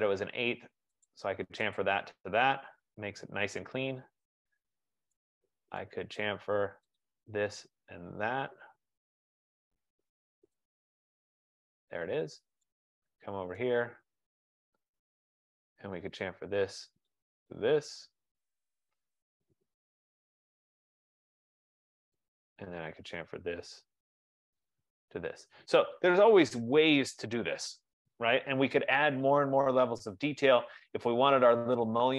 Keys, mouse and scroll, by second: 1.2 click, 2.1 click, 3.0-3.5 scroll, 3.9-4.6 scroll, 4.7-5.8 scroll, 6.0 right click, 6.4 right click, 7.1 click, 7.7 click, 9.7 F15, 10.8 click, 12.3-12.7 scroll, 13.7 right click, 14.6-15.4 scroll, 15.4 right click, 16.4 click, 17.3 click, 18.3-19.3 scroll, 19.4-19.8 scroll, 20.6 right click, 21.7 scroll, 22.4 right click, 23.1 click, 24.9 click, 26.2-26.6 scroll, 27.6 Escape, 28.3 scroll, 31.3 right click, 31.3-31.8 scroll.